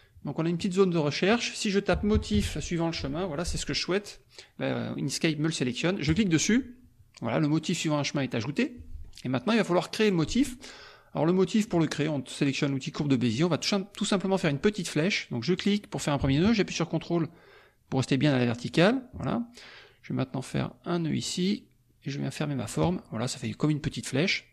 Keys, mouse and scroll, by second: 1.3 click, 1.7-2.8 typing, 6.1 click, 8.5 middle click, 11.6 click, 15.5 click, 18.6 ctrl+click, 21.1 ctrl+click, 22.5 ctrl+click.